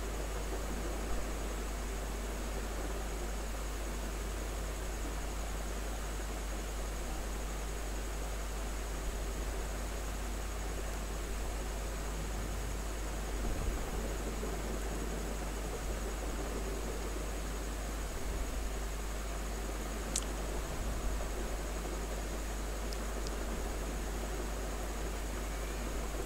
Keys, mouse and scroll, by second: 2.1-4.8 drag, 4.8-14.7 drag, 14.7 space, 14.8 click, 15.2 space, 15.8 alt+click, 17.0 ctrl+click, 24.1 click, 24.8 ctrl+z.